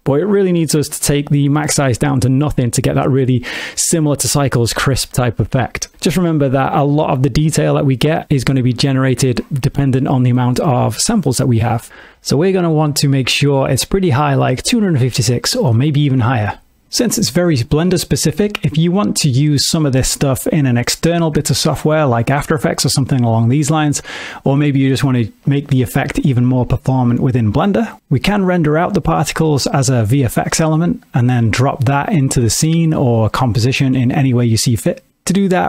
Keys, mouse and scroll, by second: 1.2 click, 5.9-7.7 scroll up 4, 10.0 middle click, 21.1 middle click, 27.1 space, 29.1 middle click, 32.8 space, 34.3 ctrl+space.